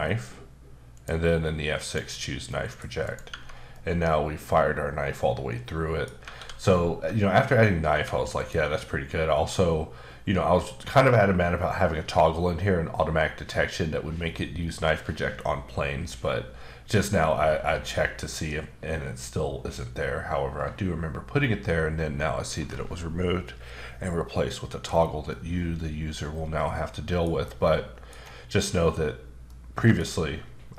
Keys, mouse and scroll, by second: 0.9 click, 1.8 click, 2.5 middle click, 3.0 click, 3.3 Tab, 3.7 middle click, 6.3 a, 7.9 Tab, 8.3 click, 25.3 middle click, 27.6 middle click, 28.2-29.0 scroll down 1, 29.5 middle click.